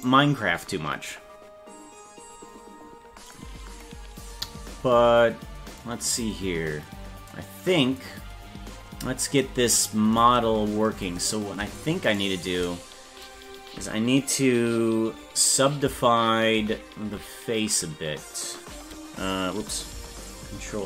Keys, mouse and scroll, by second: 0.0 right click, 2.8 scroll down 2, 12.1 shift+right click, 16.6 ctrl+;, 20.8 ctrl+l.